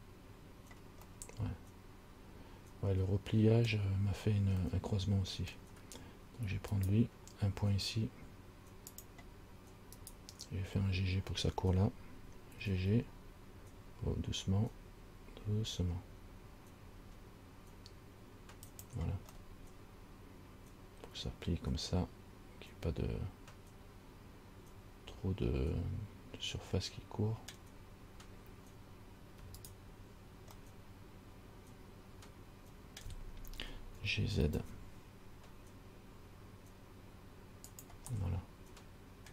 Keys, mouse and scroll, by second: 1.4 middle click, 5.0 middle click, 7.0 right click, 9.2 click, 10.2 right click, 12.9 g, 19.6 middle click, 29.8 shift+right click, 30.9 middle click, 34.2 g, 38.5 middle click.